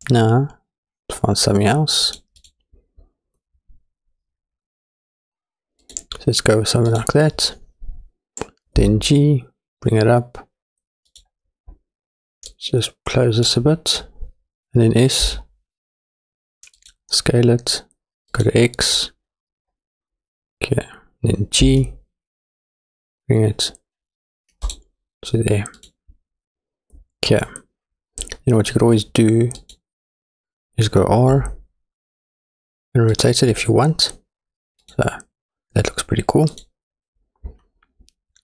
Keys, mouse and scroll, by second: 1.5 click, 2.4-5.9 drag, 6.9 click, 8.8 g, 12.5-13.6 drag, 15.3 s, 18.3 click, 19.3-19.8 scroll up 1, 19.8-21.3 scroll down 2, 21.6 g, 25.8 click, 29.6 click, 31.3 r, 34.9 click, 36.5 click.